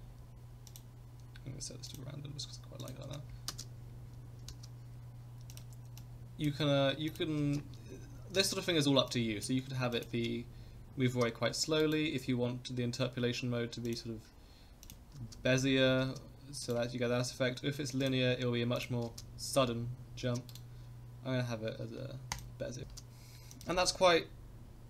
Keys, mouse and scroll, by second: 0.7-2.9 drag, 3.5 space, 4.5 space, 5.5 click, 6.0 click, 7.1 click, 7.4 space, 8.4 space, 9.1 click, 9.9 click, 10.1 space, 11.1 space, 11.5 a, 11.8-13.2 right drag, 13.2-14.0 drag, 14.8 click, 15.1 space, 16.0 space, 16.6-18.1 drag, 16.6 right click, 18.8 drag, 19.1 space, 20.2 space, 20.5-22.4 right drag, 23.5 click, 23.7 space.